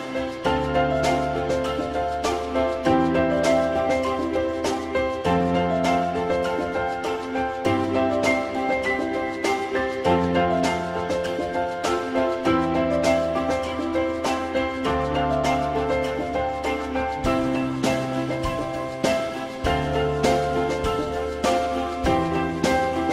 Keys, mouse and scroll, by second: 1.5 z, 3.7 alt+middle click, 6.3 alt+middle click, 13.6 alt+middle click, 18.0 alt+middle click, 21.4 alt+middle click.